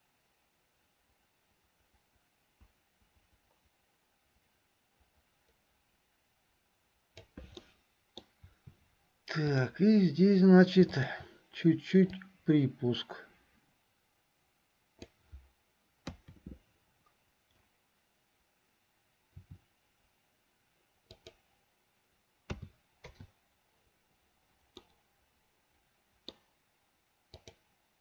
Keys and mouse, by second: 7.7 middle click, 10.9 shift+click, 12.2-15.4 drag, 22.7 a, 24.9-26.6 middle drag.